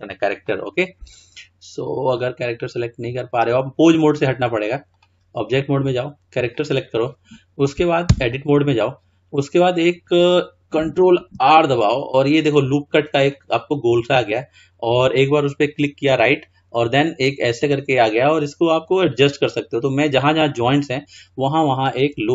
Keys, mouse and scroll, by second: 0.3 click, 2.1 click, 4.2-6.1 drag, 8.1 Tab, 11.2 ctrl+r.